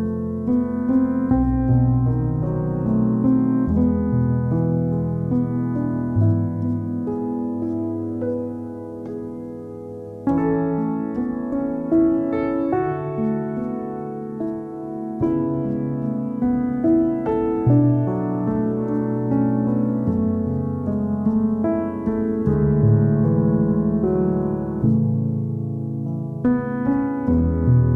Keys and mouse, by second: 0.0 Tab, 0.5 g, 0.9 Tab, 1.0 click, 1.3 alt+middle click, 1.5 Tab, 1.6 middle click, 2.1 Tab, 2.2 Tab, 3.2-4.7 typing, 3.4 alt+middle click, 5.7 g, 6.3 g, 6.7 g, 7.9 Tab, 7.9 click, 8.1 Tab, 8.4 g, 8.8 click, 9.6 g, 10.4 Tab, 10.6 click, 10.7 Tab, 10.9 click, 11.0 g, 12.0 g, 13.3 Tab, 13.4 click, 13.6 alt+middle click, 14.0 click, 14.1 Tab, 14.7 g, 15.6 click, 16.7 Tab, 16.9 alt+middle click, 17.7 Tab, 18.0 alt+middle click, 18.6 g, 19.0-20.3 alt+middle drag, 20.4 click, 20.5 g, 21.0 middle click, 21.4 g, 21.8 alt+middle click, 22.6 Tab, 22.8 alt+middle click, 23.1 Tab, 23.3 middle click, 23.5 click, 24.1 2, 24.1 KP_1, 24.4 g, 26.8 Tab, 26.9 Tab, 27.0 click, 27.2 3, 27.4 alt+middle click.